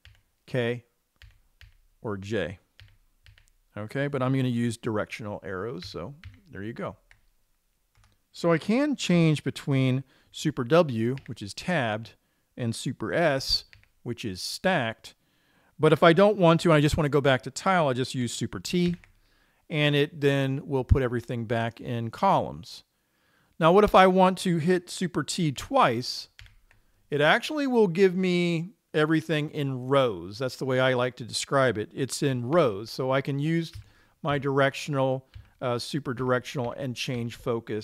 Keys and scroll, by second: 0.6 super+k, 3.3 super+j, 3.8 super+j, 6.3 super+Up, 11.8 super+w, 14.3 super+s, 19.3 super+t, 26.9 super+t, 33.0 super+Up, 35.8 super+Down, 36.7 super+Up, 37.1 super+Up, 37.6 super+Up.